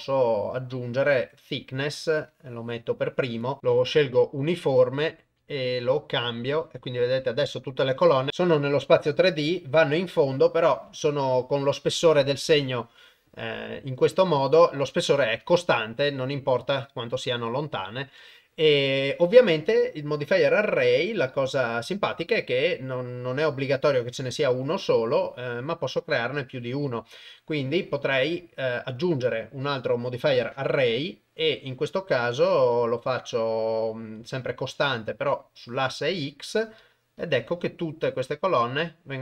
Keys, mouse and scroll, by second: 2.3 click, 4.7-7.4 ctrl+alt+shift+drag, 8.4 middle click, 9.8 middle click, 10.9 KP_0, 15.6-17.8 shift+drag, 21.3 click, 23.9 click, 27.8 click, 28.5-30.2 drag, 34.2 click, 35.2 click, 36.6-38.8 drag.